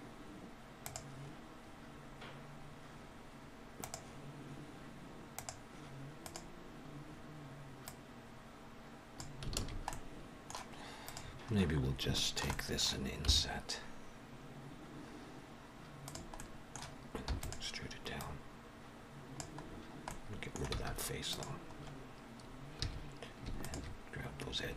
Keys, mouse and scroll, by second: 6.1 click, 7.9 click, 9.5 alt+a, 9.8 middle click, 11.0 click, 11.4-11.7 scroll up 2, 12.1 shift+middle click, 12.4 middle click, 13.2 i, 16.3 middle click, 17.2 e, 18.1 click, 19.5-20.7 scroll down 4, 20.0 middle click, 20.7 x, 21.6-22.3 scroll up 2, 22.3 scroll up 1, 22.7 2, 23.5 alt+shift+click, 24.6-24.7 scroll down 3.